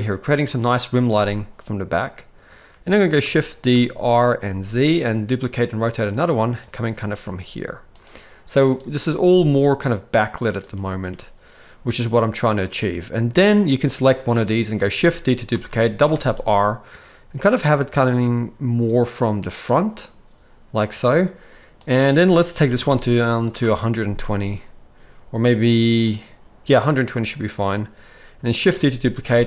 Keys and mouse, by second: 3.2 shift+d, 7.3 r, 8.7 click, 9.0 r, 15.5 shift+d, 21.9-23.5 drag, 28.6 shift+d.